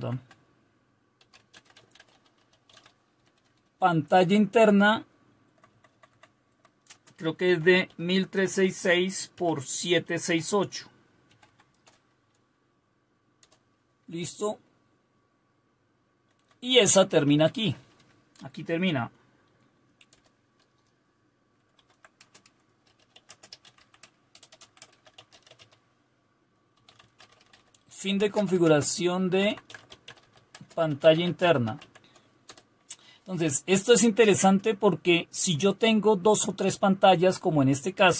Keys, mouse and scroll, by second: 0.0-3.2 typing, 0.2 Left, 3.3 Delete, 3.5 Delete, 3.7 Delete, 3.9 Delete, 4.9 Right, 5.4-11.9 typing, 6.5 Right, 13.4 Return, 14.2 Down, 14.9-16.4 Down, 16.9 Up, 17.1 Up, 17.2-17.9 typing, 19.9-32.9 typing, 34.0-35.5 typing.